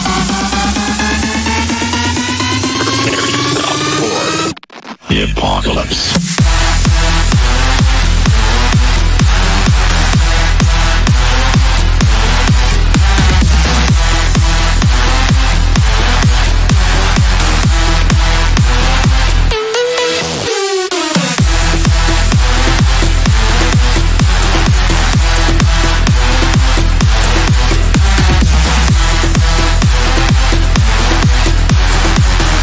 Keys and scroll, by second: 20.6 F3, 23.3 shift+F2, 30.5 F3.